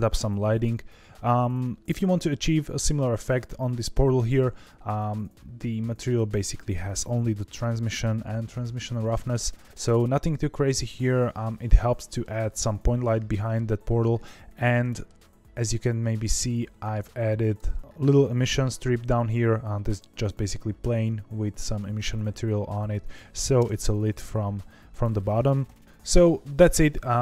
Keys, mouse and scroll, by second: 4.1 click, 5.9 scroll down 2, 11.8-15.4 middle drag, 15.4 scroll up 4, 17.3 click, 22.3 scroll down 1, 23.6 KP_0.